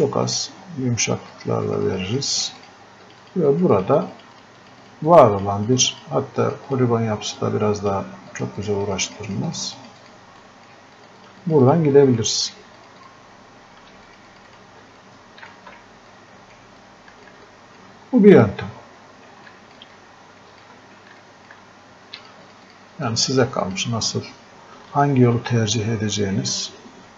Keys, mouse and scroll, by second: 1.4-10.5 drag, 15.3 shift+click, 18.2-19.5 scroll up 2, 19.5 alt+click, 23.4-27.1 drag.